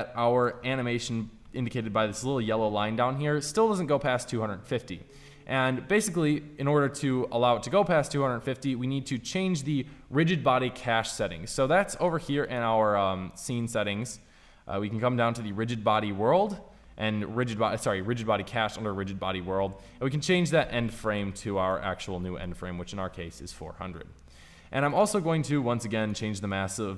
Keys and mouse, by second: 0.6 click, 3.4-5.3 drag, 21.3 KP_0, 26.7-26.9 drag.